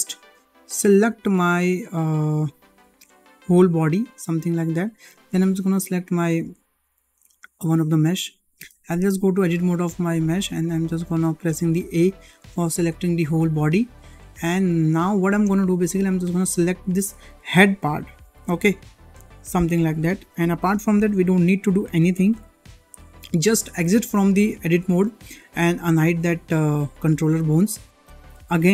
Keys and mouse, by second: 0.6 click, 3.3-3.7 middle drag, 5.6 shift+click, 8.5 Tab, 11.8 a, 13.6 click, 15.3 shift+middle click, 16.9-19.0 ctrl+drag, 21.9 3, 22.3 1, 23.9 Tab, 26.9 click, 28.1 alt+h.